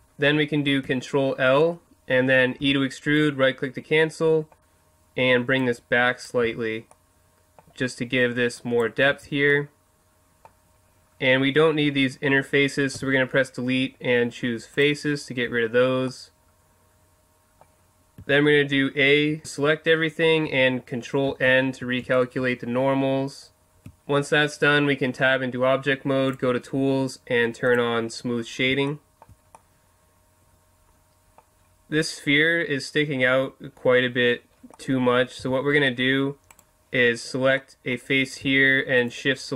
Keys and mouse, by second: 0.8 ctrl+l, 2.6 e, 3.2 click, 5.6-6.9 drag, 6.4 z, 6.9 middle click, 8.6 click, 8.6 middle click, 9.0-10.4 middle drag, 9.1 z, 12.9 Delete, 18.2 a, 22.5-23.8 middle drag, 23.8 Tab, 26.3-28.2 drag, 28.9-29.3 drag, 28.9-29.5 middle drag, 33.6-34.7 middle drag, 35.4 Tab, 39.0 right click.